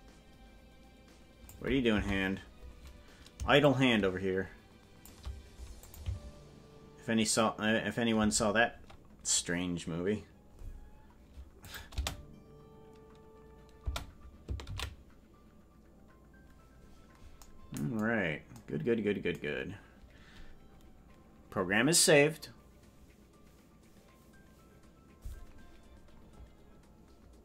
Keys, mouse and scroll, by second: 2.0 Right, 3.6-5.1 shift+drag, 5.8 click, 6.0 space, 8.2 space, 11.6 click, 11.9 space, 13.8 space, 18.1 ctrl+s.